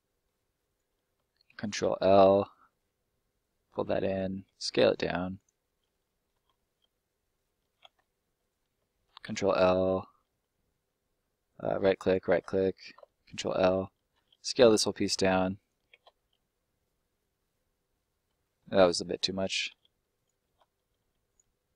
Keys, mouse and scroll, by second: 0.6 right click, 1.1 ctrl+right click, 1.5 ctrl+k, 1.8 ctrl+l, 2.4 middle click, 3.4 click, 4.4 s, 5.3 click, 5.6 middle click, 6.5 middle click, 8.3 right click, 8.7 ctrl+right click, 9.2 ctrl+l, 11.5 ctrl+right click, 12.3 right click, 13.2 ctrl+right click, 13.3 ctrl+l, 14.1 s, 15.5 click, 16.1 middle click, 18.6 ctrl+z, 19.2 middle click, 19.6 s, 20.1 right click, 21.2 right click.